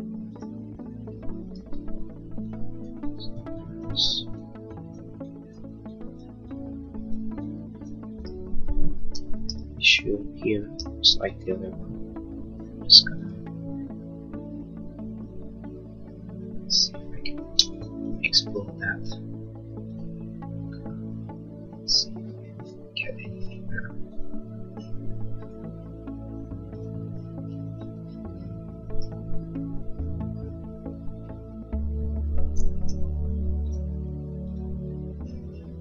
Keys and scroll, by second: 1.8 e, 9.2 l, 15.9 Escape, 33.0 l.